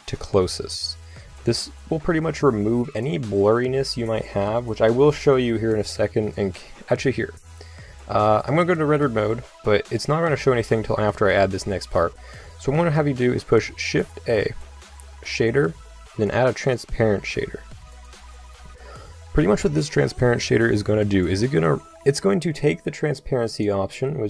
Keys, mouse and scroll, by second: 7.2 z, 14.2 shift+a, 23.4-24.2 drag.